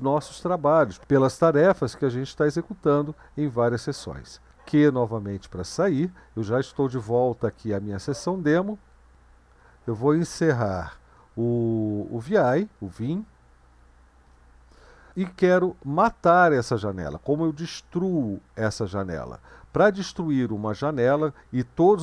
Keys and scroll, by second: 4.8 q, 10.6-11.3 typing, 14.3 Return.